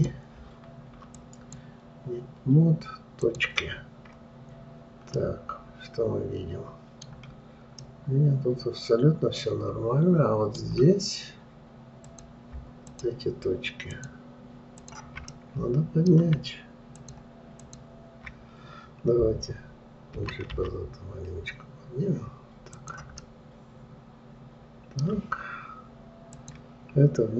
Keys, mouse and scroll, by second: 0.3-3.4 drag, 3.7 click, 4.5-5.6 scroll up 2, 5.6-7.5 middle drag, 7.5-8.3 scroll down 3, 8.3-11.3 middle drag, 12.5 click, 13.4 shift+click, 14.3 shift+click, 15.2 shift+click, 15.7-17.4 middle drag, 17.4 shift+click, 18.0 shift+click, 20.6 g, 23.7-26.7 middle drag, 26.8 click.